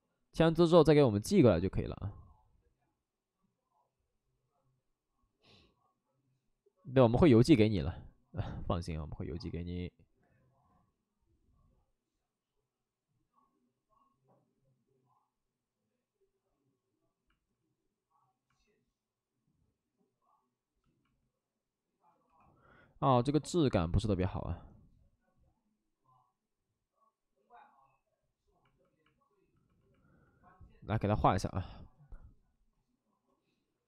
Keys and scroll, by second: 25.1 2.